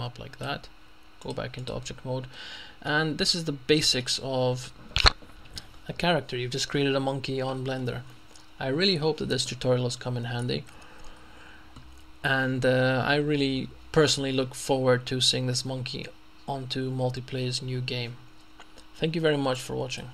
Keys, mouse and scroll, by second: 1.2 click, 2.4 middle click, 3.3 scroll down 1, 7.8 middle click, 8.8 scroll down 1, 9.0 middle click, 20.0 click.